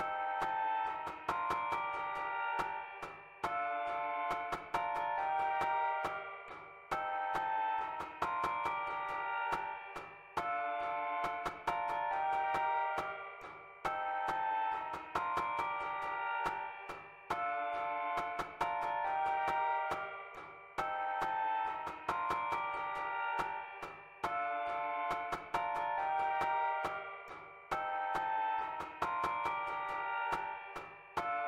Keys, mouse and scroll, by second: 1.4 click, 2.3 click, 3.8-4.9 drag, 5.1 click, 8.9-10.1 drag, 10.5-11.8 drag, 12.3-14.0 drag, 14.1 click, 15.0-18.4 drag, 18.9-24.6 drag, 25.0-26.5 drag, 27.0 click, 28.1 0, 30.1 click.